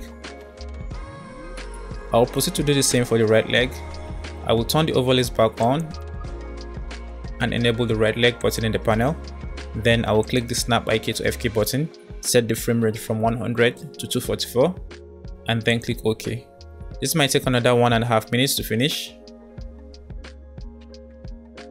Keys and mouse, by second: 1.1 space, 1.4-2.8 middle drag, 5.7 click, 8.5 click, 10.4-21.7 drag.